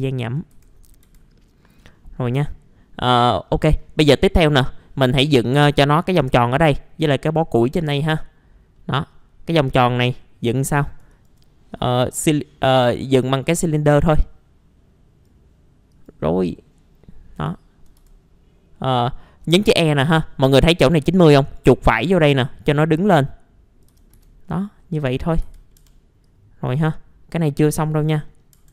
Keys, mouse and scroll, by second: 0.2 click, 0.5 F4, 0.7-1.0 scroll up 1, 1.0 F4, 1.5-1.9 scroll down 1, 1.9 middle click, 2.9-3.4 scroll up 1, 3.4 middle click, 3.9 scroll up 1, 4.3-5.4 middle drag, 7.8-8.2 scroll down 1, 8.2 middle click, 9.2-9.5 scroll up 1, 9.6 middle click, 10.6-11.0 scroll up 1, 11.1 ctrl+right click, 13.1-15.5 drag, 17.5 alt+middle click, 19.4 scroll down 1, 21.4-22.4 right drag, 22.1 w, 22.8 click, 23.9 f, 24.1 z, 24.4-24.8 scroll down 1, 24.8 middle click, 25.2 scroll up 1, 25.4 F4, 25.8 F3, 26.2-28.3 drag, 28.3 middle click, 28.4 scroll down 1, 28.5-28.7 scroll up 1.